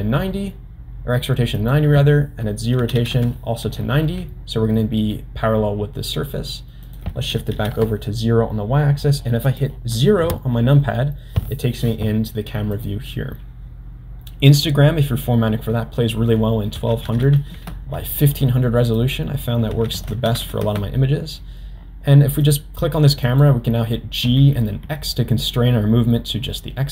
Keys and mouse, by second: 1.6 click, 4.7 middle click, 6.8 click, 9.4 click, 10.2 KP_0, 14.5 click, 17.2 0, 19.0-21.5 drag, 20.4 0, 22.4 click, 23.3 click, 24.3 g.